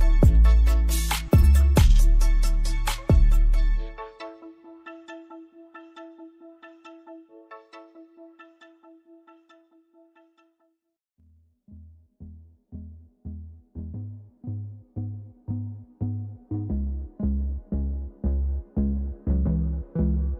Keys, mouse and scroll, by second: 1.7 ctrl+c, 1.8 typing, 2.6 click, 4.9 Down, 5.7 Down, 5.8 Down, 5.9 Down, 8.0 shift+click, 8.7 shift+click, 9.4 shift+click, 11.3-11.7 scroll up 1, 12.7 click, 13.7 right click, 14.6 click, 16.9 right click, 18.0 click.